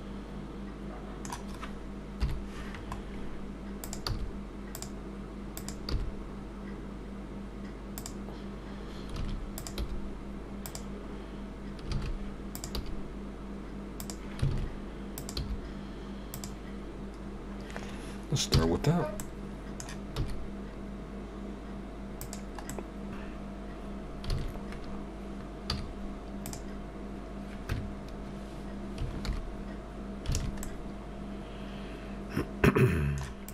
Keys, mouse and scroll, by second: 2.9 scroll up 4, 2.9 KP_7, 3.8 middle click, 5.6 click, 9.2 a, 11.9 a, 14.5 a, 18.9-19.4 scroll down 5, 18.9 a, 19.2 middle click, 20.2 e, 22.7 middle click, 24.3 alt+a, 25.7 z, 29.2 alt+h, 30.4 alt+a, 30.6 middle click, 33.4 click.